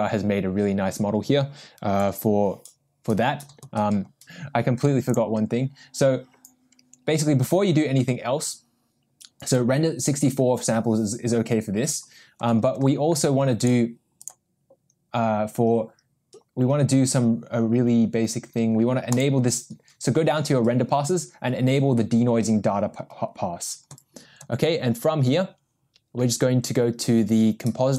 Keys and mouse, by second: 2.0 n, 14.2 click, 19.1 drag.